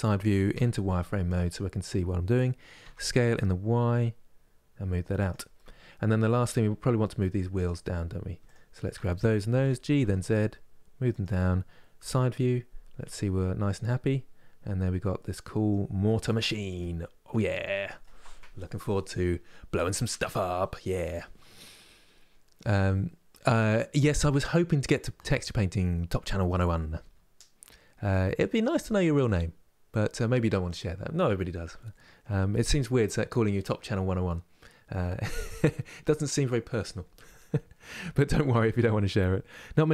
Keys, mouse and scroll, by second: 0.2 z, 5.3 middle click, 6.2-6.6 scroll down 2, 7.3-9.3 drag, 9.3 g, 11.8 KP_3, 13.6-15.7 middle drag, 15.7-16.5 scroll down 1, 16.5-19.5 middle drag.